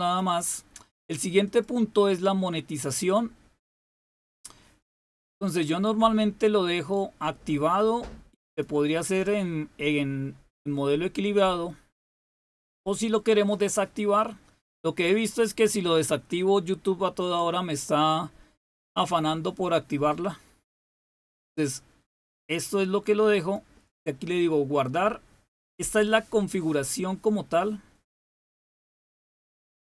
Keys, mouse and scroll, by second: 1.4 click, 4.8-9.0 drag, 12.7-14.2 drag, 20.2-23.5 drag, 25.5 click.